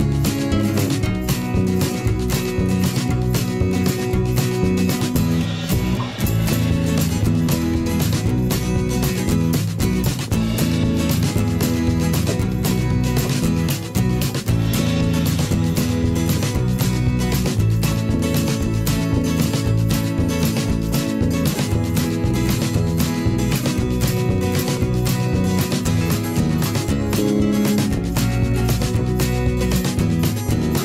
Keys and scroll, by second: 6.9 ctrl+a.